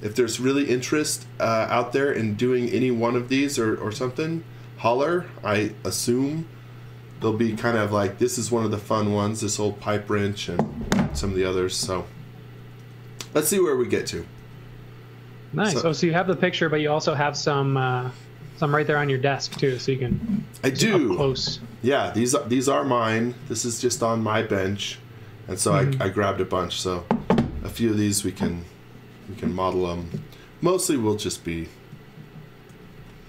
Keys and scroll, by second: 14.0 x, 14.4 v, 16.7 x, 31.9 z, 32.7 x, 33.0 v.